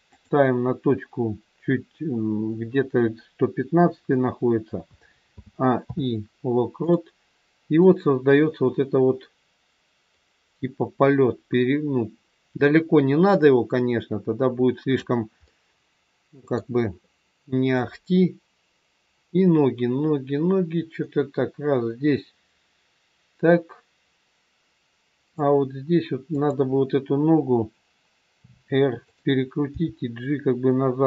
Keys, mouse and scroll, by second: 5.4 a, 5.7 i, 7.9 click, 15.5 middle click, 17.7 click, 26.3 click, 28.4 r, 29.6 g.